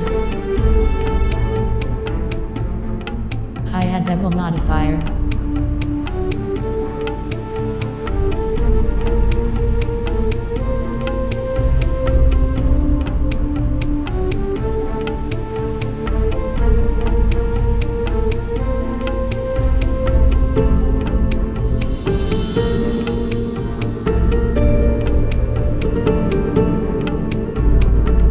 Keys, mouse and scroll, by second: 1.0-2.9 right drag, 2.0 click, 4.3 middle click, 4.8 z, 5.3-6.6 middle drag, 6.6-7.0 scroll up 1, 7.1-10.8 drag, 10.8 middle click, 11.4-12.8 middle drag, 12.0 z, 12.4 z, 13.3-14.6 middle drag, 15.2-18.4 drag, 19.1 z, 19.5-21.4 middle drag, 21.4 scroll up 1, 21.6-22.9 middle drag, 21.8 Return, 23.7 z, 24.3 Tab, 25.7-28.2 right drag, 27.0-28.2 drag, 28.2 middle click.